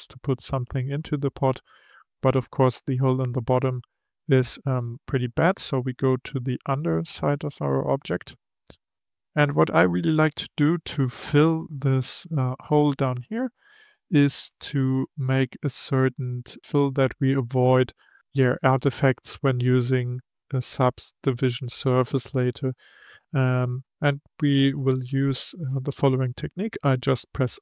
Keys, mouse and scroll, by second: 1.5-6.8 middle drag, 6.8-7.4 scroll up 1, 7.4-10.3 shift+middle drag, 10.3 Tab, 15.6-16.6 scroll up 2, 16.6 shift+middle click.